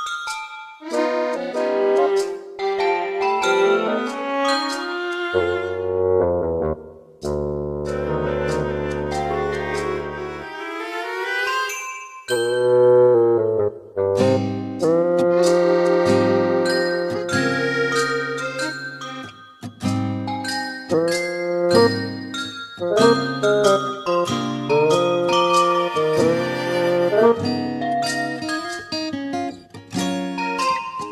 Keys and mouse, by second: 1.4 right click, 7.9 middle click, 9.8 right click, 11.3 middle click, 14.4 middle click, 19.3 middle click, 23.0 middle click, 25.1 middle click, 26.4 middle click, 27.8 middle click.